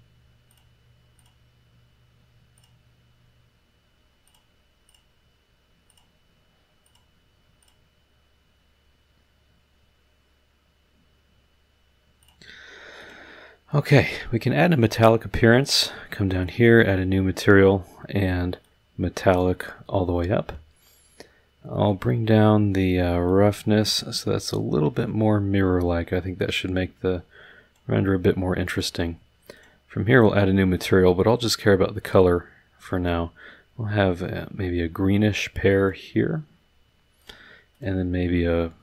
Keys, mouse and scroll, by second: 0.5 click, 1.1 click, 2.5 click, 4.2 click, 4.8 click, 5.9 click, 6.8 click, 7.6 click, 12.2 click, 13.0 click, 13.9 click, 15.6 click, 16.4 click, 18.6-19.6 drag, 23.2-27.9 drag, 28.7 click, 29.5 click, 30.7 click, 32.2-36.1 drag, 37.2 click, 37.7 click.